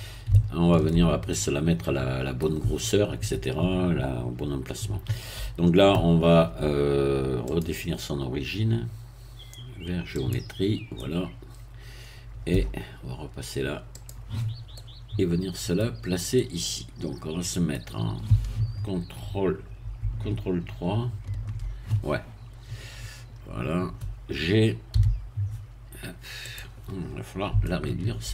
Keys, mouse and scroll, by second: 0.6 shift+middle click, 1.3-1.7 shift+scroll up 1, 1.7-2.7 middle drag, 7.5 click, 10.1 click, 10.9-12.7 middle drag, 13.9 click, 14.7-15.8 middle drag, 15.8-16.3 scroll down 1, 16.3-17.9 middle drag, 21.0 ctrl+3, 22.3-23.3 scroll up 2, 23.3-23.6 scroll up 1, 24.9 g, 26.4 click, 27.0-27.5 scroll up 2, 27.6 shift+middle click.